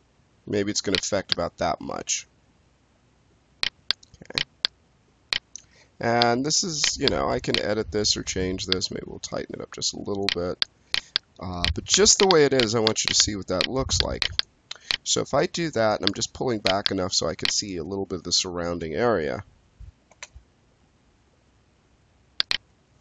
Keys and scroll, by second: 18.6 space, 20.0 space.